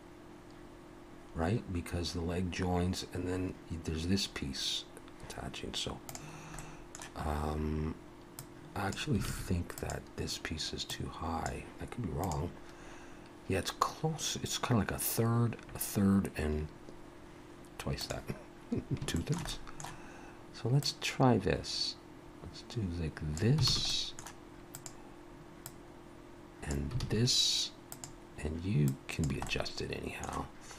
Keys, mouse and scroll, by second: 6.6 middle click, 8.4 click, 9.3 alt+a, 9.8 click, 10.9 click, 19.2 shift+middle click, 19.5 middle click, 20.8 click, 23.7 alt+a, 23.9 middle click, 24.7 click, 25.7 click, 27.0 alt+a, 27.9 click, 29.5 click, 29.5 middle click.